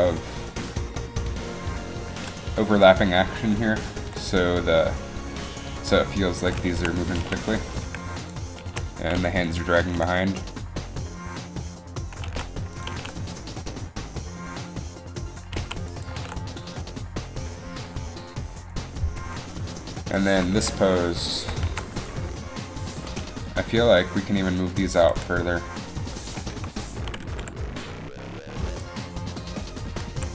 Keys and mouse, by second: 2.1 r, 2.1 a, 4.1 r, 6.7 a, 7.4 a, 8.5 i, 8.8 a, 9.9 alt+a, 12.5 alt+a, 13.1 alt+a, 16.0 alt+a, 16.4 alt+a, 20.7 Up, 21.8 alt+a, 25.1 g, 26.6 KP_1, 27.4 g, 30.0 g.